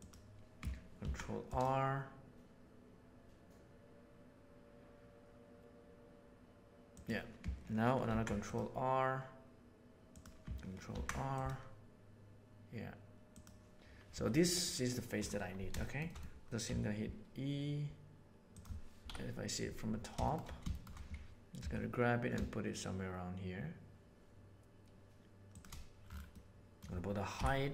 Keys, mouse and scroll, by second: 8.0 ctrl+r, 10.9 ctrl+r, 14.0 3, 15.8 shift+middle click, 16.7 e, 19.0 KP_7, 20.2 middle click, 20.7 middle click, 21.5 g, 26.3 middle click, 27.3 KP_1.